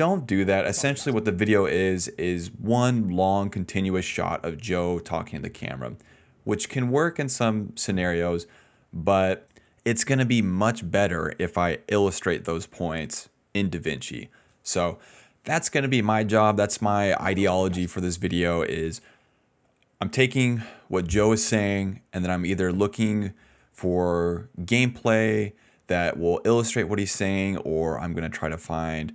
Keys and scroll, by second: 0.6 space, 1.1 space, 17.0 space, 17.9 space, 25.0 s, 25.2 s, 26.6 d, 26.8 ctrl+z, 27.4 d, 27.9 s.